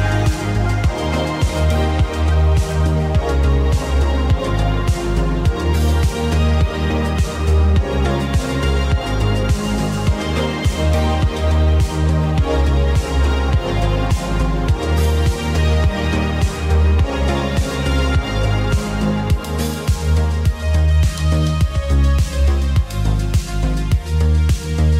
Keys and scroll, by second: 0.1 g, 0.8 ctrl+KP_1, 4.0 space, 8.1 space, 12.1 g, 13.2 g, 14.1 g, 15.4 g, 16.2 g, 17.4 g, 18.5 g, 20.1 g, 22.0 g, 24.3 g.